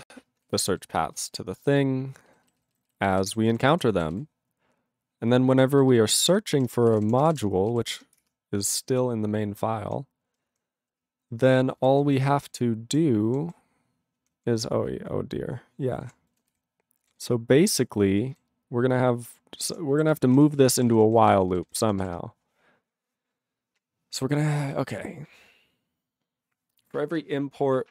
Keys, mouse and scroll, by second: 0.6 alt+b, 0.7 alt+b, 1.1 alt+f, 1.3 alt+f, 2.3 ctrl+b, 2.4 ctrl+b, 2.7 ctrl+b, 2.8 ctrl+b, 3.1 ctrl+b, 3.2 ctrl+b, 3.4 ctrl+space, 3.4 ctrl+e, 3.7 ctrl+g, 4.1 ctrl+s, 4.2-5.3 ctrl+n, 5.8 alt+b, 6.5-7.8 typing, 8.2 Return, 8.8-9.9 ctrl+p, 10.2 ctrl+p, 10.5 ctrl+p, 14.0 ctrl+n, 14.1 ctrl+p, 14.3 ctrl+p, 14.8 ctrl+n, 15.1 ctrl+p, 15.7-16.3 ctrl+p, 16.4 ctrl+s, 17.1 ctrl+n, 19.9 ctrl+p, 20.1 ctrl+s, 20.2 ctrl+n, 20.3 ctrl+a, 20.4 ctrl+n, 20.5 ctrl+space, 20.5 ctrl+e, 20.6 ctrl+n, 20.7 ctrl+n, 20.7 ctrl+e, 20.8 ctrl+n, 20.9 ctrl+e, 21.0 ctrl+n, 21.1 ctrl+g, 21.2 ctrl+e, 21.3 ctrl+n, 21.5 ctrl+n, 21.6 ctrl+n, 21.9 ctrl+s, 22.7-23.4 scroll down 4, 23.4-25.9 scroll down 1, 27.1 click, 27.3 click.